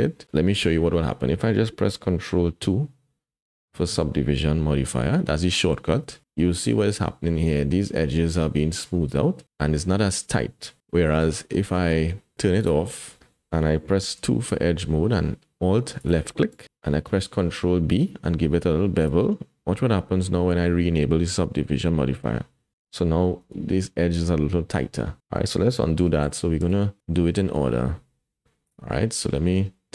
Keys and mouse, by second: 0.6 Tab, 5.9 ctrl+2, 11.7 Tab, 12.6 click, 14.2 2, 16.0 alt+click, 17.0 ctrl+b, 22.1 click, 23.4 Tab, 26.0 ctrl+z, 26.3 ctrl+z, 27.0 ctrl+z, 28.6 click, 29.6 Tab.